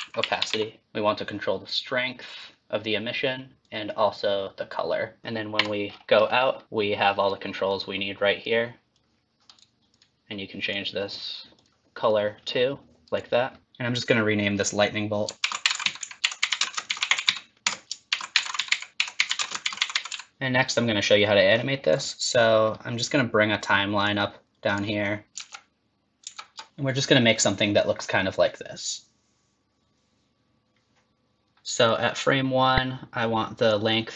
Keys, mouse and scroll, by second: 33.7 click.